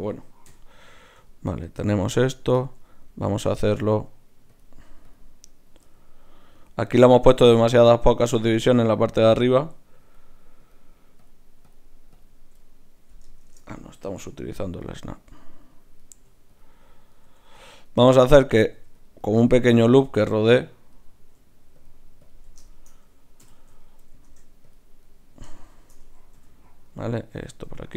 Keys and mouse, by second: 0.5 KP_Divide, 4.5-6.8 drag, 10.0-14.1 drag, 13.4 shift+Tab, 14.1 g, 15.0 click, 15.1 g, 15.6-24.2 right drag, 16.1 g, 17.2 g, 18.0 g, 18.7 g, 19.4 g, 21.8-24.2 drag, 23.4 f, 23.8 middle click, 24.2 ctrl+Tab, 25.0 click, 26.4 f, 27.3 f, 27.7 f.